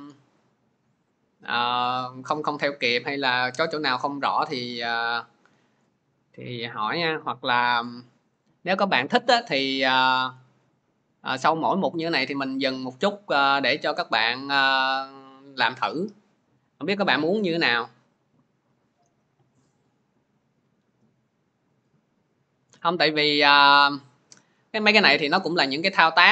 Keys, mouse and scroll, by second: 23.8 click.